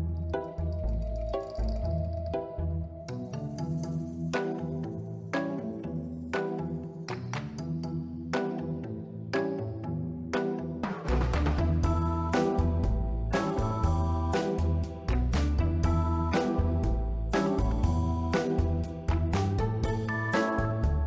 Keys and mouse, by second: 1.0 Tab, 1.2 click, 1.4 b, 1.9 s, 3.1 r, 3.3 x, 4.1 click, 4.6 click, 5.9 s, 6.4 click, 6.9 click, 8.0 click, 8.9 Tab, 9.8 middle drag, 10.3-10.7 middle drag, 11.0 middle click, 11.4 middle click, 12.0 ctrl+middle click, 12.5-13.3 middle drag, 13.6-14.3 middle drag, 14.5-15.0 ctrl+middle drag, 15.8 click, 16.0 middle click, 16.4 ctrl+middle click, 16.7 Tab, 17.0 1, 17.5 b, 18.4 click, 19.5 b, 20.1 click, 20.8 b.